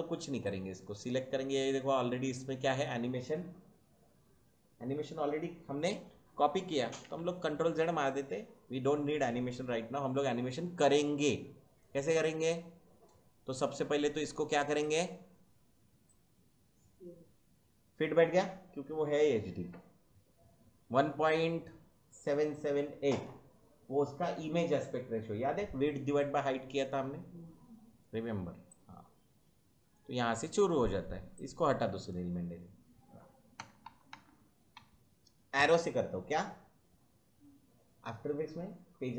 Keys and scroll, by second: 7.0 ctrl+z, 33.5 Left, 34.7 Right, 35.5 Left.